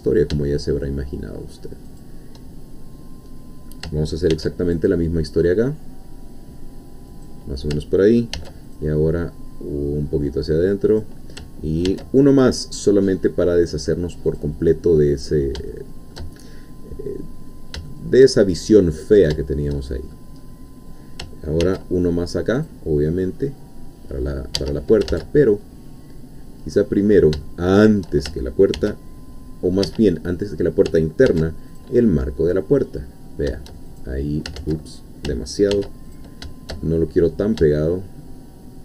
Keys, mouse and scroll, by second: 1.9 shift+click, 4.3 ctrl+r, 4.7 ctrl+click, 7.1 click, 8.3 ctrl+r, 8.7 ctrl+click, 10.9 click, 11.9 ctrl+r, 12.4 ctrl+click, 14.3 click, 15.7 shift+middle click, 17.1-17.4 scroll down 2, 17.9-19.3 shift+middle drag, 19.4-20.4 shift+middle drag, 20.4-21.2 shift+scroll up 3, 21.6 ctrl+r, 22.6 click, 24.5 Escape, 25.1 ctrl+z, 25.4-26.9 ctrl+middle drag, 27.0-27.3 scroll up 2, 27.4 shift+middle click, 28.8 ctrl+r, 29.9 Escape, 30.1-30.5 scroll down 2, 31.3 ctrl+r, 31.8 ctrl+click, 33.9 shift+click, 34.6 ctrl+z, 35.7 ctrl+r, 36.1 ctrl+click.